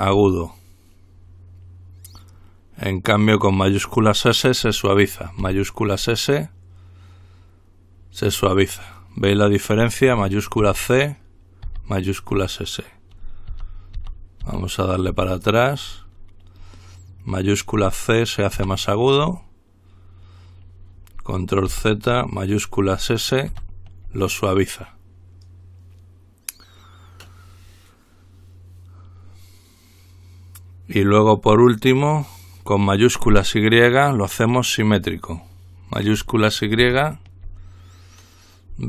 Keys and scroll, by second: 5.7 typing, 11.0-11.9 typing, 13.7 ctrl+z, 14.2 ctrl+z, 14.7 ctrl+z, 15.3 ctrl+z, 18.8 c, 21.9 ctrl+z, 23.7 s, 37.0 y.